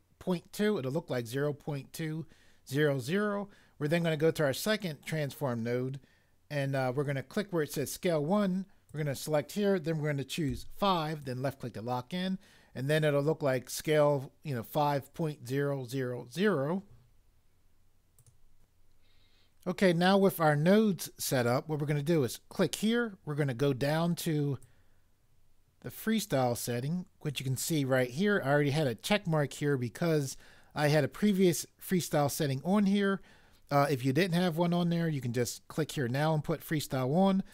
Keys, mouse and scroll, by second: 10.5 5.